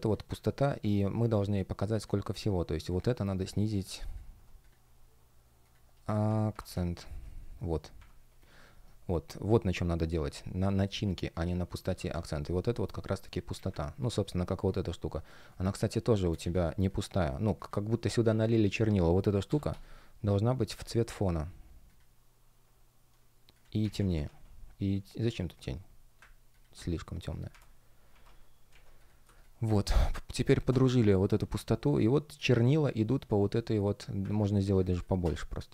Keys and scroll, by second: 6.0 shift+Up, 6.6 shift+Down, 7.9 shift+Up, 11.9 Escape, 13.5 shift+3, 14.0 shift+3, 15.2 space, 23.8 shift+Down, 27.4 shift+Up, 28.6 shift+Down, 29.1 space, 34.8 shift+Return.